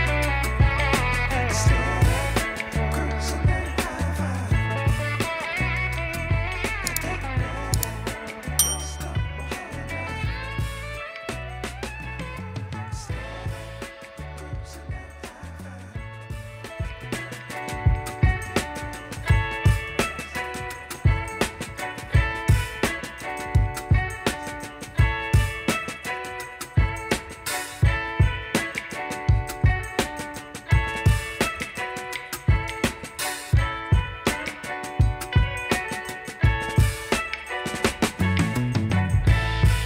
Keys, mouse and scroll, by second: 0.0 middle click, 3.6 alt+scroll down 1, 3.8 alt+middle click, 4.8-5.2 alt+scroll up 1, 5.2 middle click, 7.8 shift+click, 12.0 shift+click, 14.5 ctrl+z, 16.0 Delete, 22.0 shift+click, 22.6-23.1 alt+scroll up 3, 23.3 alt+scroll down 1, 23.4 alt+middle click, 25.7 shift+click, 26.5 shift+click, 28.7 double click, 29.4 typing, 29.9 Return, 30.6 middle click, 31.5 shift+click, 31.9 shift+click, 32.5 shift+click, 32.8 shift+click, 33.8 shift+click, 35.1 typing, 36.7 alt+scroll down 1, 36.8 alt+middle click, 38.6 shift+click.